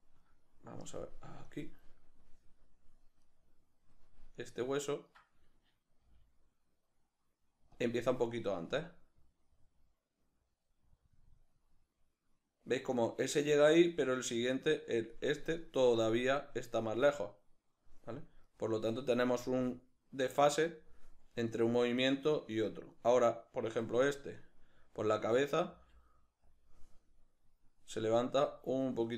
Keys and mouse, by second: 1.5-3.4 drag, 3.4 right click, 4.4 right click, 5.0 right click, 6.1 g, 6.7 g, 7.8 click, 8.8-15.6 drag, 15.6 right click, 18.5 right click, 19.4 g, 20.8 click, 21.6 right click, 22.0 right click, 24.4 right click, 25.7 g, 26.6 click, 28.2-29.1 drag.